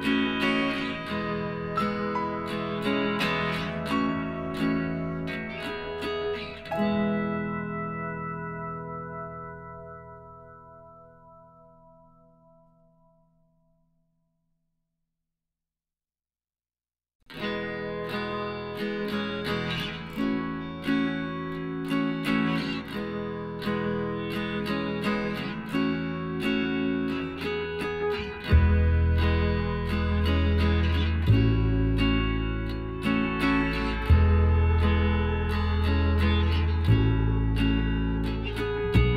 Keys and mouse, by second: 1.7-3.4 drag, 4.3 s, 7.3-9.1 middle drag, 8.3-10.8 right drag, 10.0-11.7 drag, 12.1 s, 16.9-18.7 middle drag, 18.7 z, 19.6-22.7 right drag, 22.6 shift+z, 23.6 z, 24.2-25.8 middle drag, 25.8-27.6 drag, 28.7 s, 31.9-33.0 middle drag, 33.0 z, 33.2-34.5 middle drag, 34.5-39.1 right drag, 38.5 z.